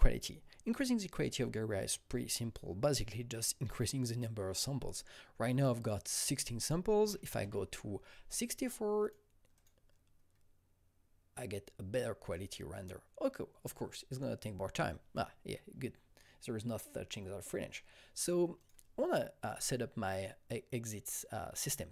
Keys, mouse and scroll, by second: 7.0 double click, 7.0 KP_6, 7.1 KP_4, 7.4 KP_Enter, 9.5 click, 18.5 click.